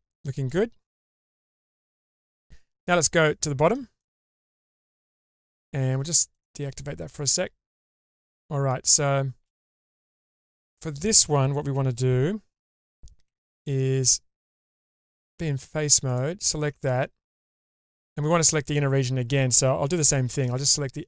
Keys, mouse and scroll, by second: 3.0 middle click, 4.0 shift+middle click, 4.4 Tab, 5.0-5.5 middle drag, 6.4-6.8 drag, 7.6 scroll down 1, 8.0 middle click, 9.1 shift+scroll up 2, 10.5 scroll up 3, 13.3 2, 14.0 ctrl+alt+click, 15.3 3, 16.1 ctrl+alt+click, 20.0 2.